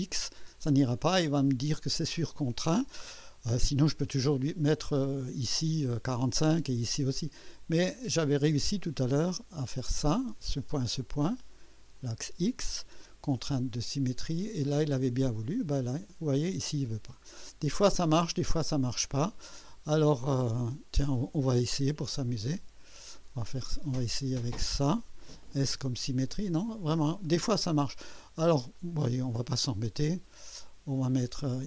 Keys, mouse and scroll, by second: 8.2 click, 10.1 click, 11.9 click, 14.2 click, 16.1 click, 17.3 scroll up 2, 18.5 scroll down 2, 19.3 scroll up 2, 21.4 click, 23.0 click, 24.6 click, 25.7 s, 27.2 click, 28.7 click.